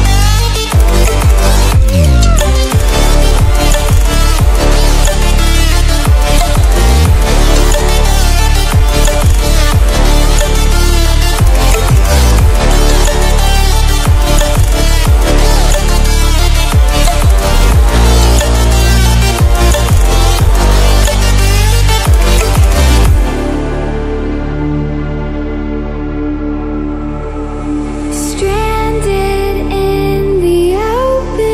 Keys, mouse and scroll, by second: 0.3 click, 2.9 click, 4.2 right click, 5.7-12.3 drag, 12.3 ctrl+w, 15.0 click, 16.1 ctrl+w, 17.5-20.9 drag, 20.9 ctrl+w, 24.0 ctrl+w, 25.3-29.2 drag, 29.2-31.5 drag.